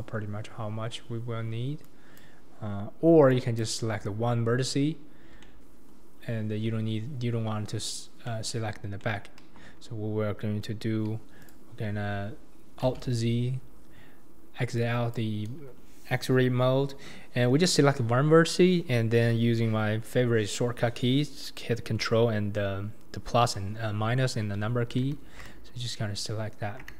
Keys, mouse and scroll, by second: 0.0 click, 1.8 click, 3.3 click, 4.9-5.4 scroll down 1, 5.4-9.4 middle drag, 9.4 KP_1, 11.4 click, 12.8 alt+z, 13.7-14.1 scroll up 2, 14.8 click.